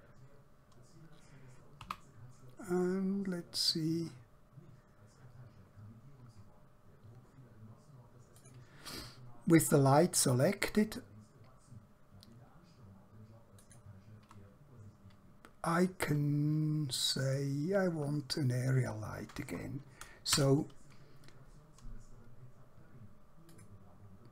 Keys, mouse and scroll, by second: 1.9 g, 8.5 click, 13.5 click, 17.2 click, 20.3 KP_0, 23.5 click.